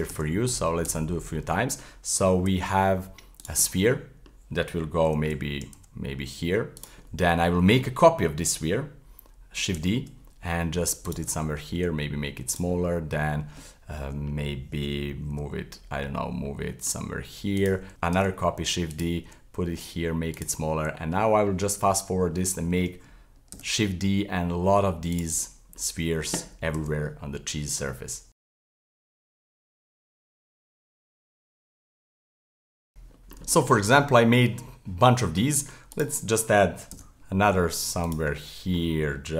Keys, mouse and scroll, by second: 0.0-0.9 typing, 1.4 middle click, 2.1 g, 3.7-5.1 middle drag, 5.1 g, 7.1-9.7 middle drag, 9.7 shift+d, 11.3 middle click, 11.8 s, 12.7-15.3 middle drag, 15.3 f, 15.9-16.6 scroll down 7, 16.6-17.0 middle drag, 17.0 g, 17.9 shift+s, 18.1 shift+d, 19.3 s, 20.6-23.5 middle drag, 23.5 shift+d, 25.4-26.8 middle drag, 26.8 shift+d, 28.3 middle click, 28.4-32.8 typing, 28.6 middle click, 28.8 middle click, 29.4 middle click, 29.6 middle click, 29.8 middle click, 30.5 shift+middle drag, 30.7 middle click, 30.9 middle click, 31.2 middle click, 31.6 middle click, 31.9 shift+middle click, 32.1 middle drag, 32.3 right click, 32.3 scroll down 1, 32.5 middle click, 32.7 middle click, 32.9 middle click, 32.9-33.5 scroll down 3, 33.2 middle click, 33.5-35.9 shift+middle drag, 35.9 right click, 36.9 shift+d, 38.3-39.3 middle drag.